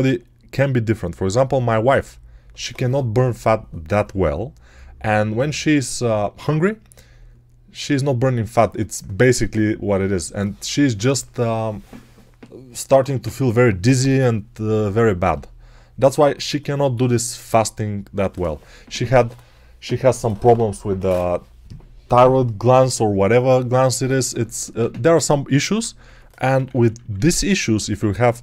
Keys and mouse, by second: 25.9-27.1 typing.